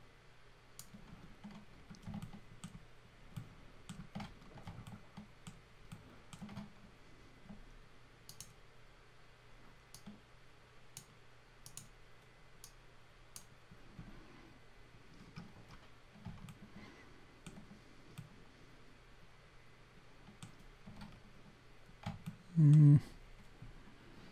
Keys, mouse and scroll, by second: 1.7 scroll down 2, 2.2 alt+middle click, 3.3 alt+middle click, 4.4 scroll down 2, 4.9 alt+middle click, 5.9 alt+middle click, 8.3 click, 9.9 click, 11.7 click, 12.7 click, 15.2 scroll down 2, 16.5 alt+middle click, 18.2 alt+middle click, 21.1 scroll up 3, 22.2 alt+middle click.